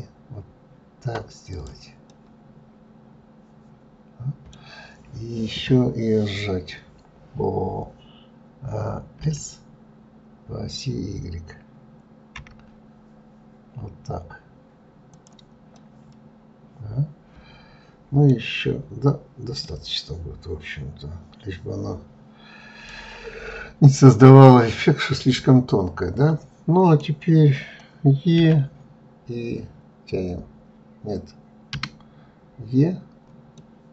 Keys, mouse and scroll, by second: 2.4-5.1 middle drag, 5.1-8.1 scroll up 1, 16.0-19.0 middle drag, 19.9-22.9 middle drag, 25.4-28.5 middle drag, 33.8-33.9 middle drag.